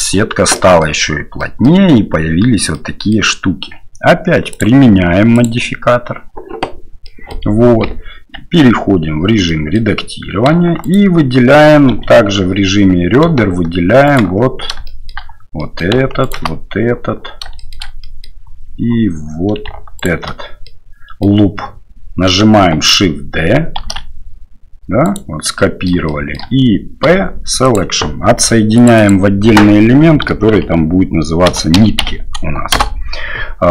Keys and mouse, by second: 0.6 middle click, 1.4 drag, 2.7-3.1 drag, 7.0 click, 8.5 Tab, 9.5 click, 10.8 alt+click, 12.0 2, 14.1 alt+click, 14.8 shift+middle click, 15.6 middle click, 16.2 alt+shift+right click, 17.5 shift+middle click, 18.1 middle click, 20.0 alt+shift+click, 20.6 middle click, 24.0 shift+d, 25.6 middle click, 26.1 shift+middle click, 29.0-33.3 drag.